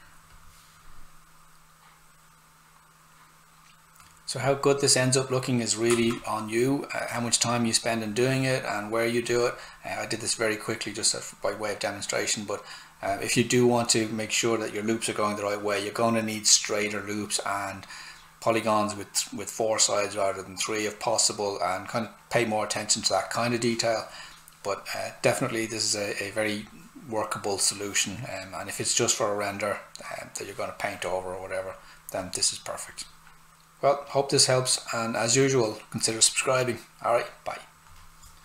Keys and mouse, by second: 5.8 s, 6.0 click.